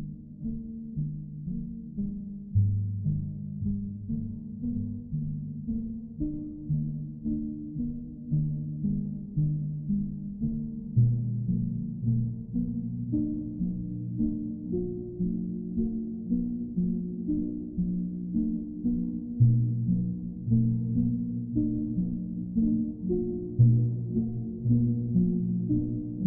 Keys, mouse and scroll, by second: 0.5 w, 3.1 alt+click, 5.2 alt+click, 8.6 ctrl+click, 9.1 alt+click, 12.2 ctrl+click, 12.5 ctrl+click, 14.5 ctrl+click, 15.0 ctrl+click, 17.9 click, 18.6 ctrl+click, 19.7 click, 20.1 shift+click, 21.0 alt+click, 22.2 click, 22.6 shift+click, 23.4 alt+click, 24.4 alt+click, 25.7 alt+click, 26.1 alt+click.